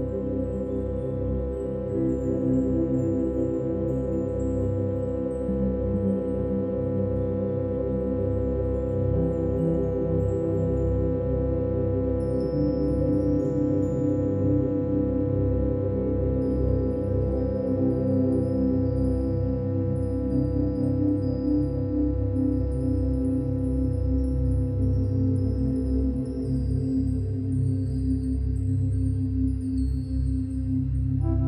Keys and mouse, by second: 0.3 click, 1.3 g, 1.7 x, 5.2 click, 6.8 alt+shift+click, 7.9 click, 12.5 g, 15.1 shift+click, 16.2 click, 16.5 click, 17.3 g, 19.7 shift+click, 21.2 g, 22.8 shift+click, 23.3 click, 24.6 g, 28.0 shift+click, 29.2-31.4 ctrl+alt+drag.